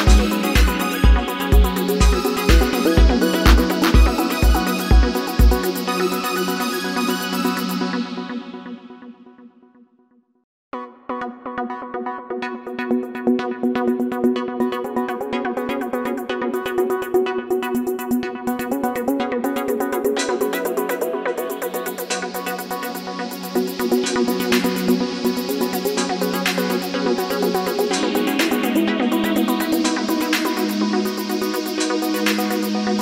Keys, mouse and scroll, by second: 22.8 typing, 25.2-25.9 typing.